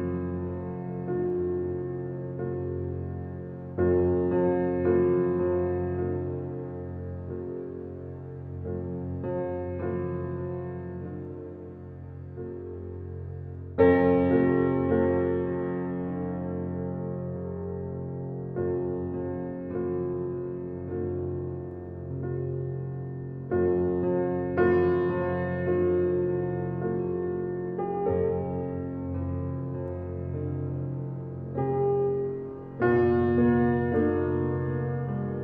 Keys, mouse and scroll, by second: 3.2 click, 3.8 click, 7.0 Escape, 7.9 click, 22.7 Escape, 23.4-26.9 alt+drag, 26.9 alt+right click, 27.4 alt+middle click, 28.6 alt+click, 29.5 alt+middle click, 30.0 alt+right click, 31.4 alt+middle click, 31.5 alt+right click, 32.1 alt+middle click.